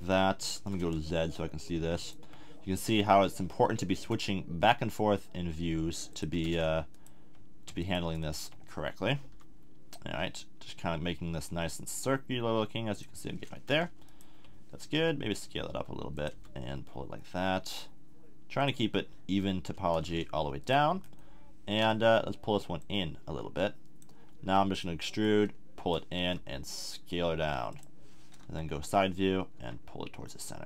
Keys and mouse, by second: 0.4 z, 2.9 g, 9.2 g, 13.0-15.0 drag, 14.1 right click, 15.0 s, 16.3 g, 18.6-19.8 drag, 20.6 click, 21.0-22.8 middle drag, 24.5 e, 26.2 s, 28.4 KP_3, 29.6 g.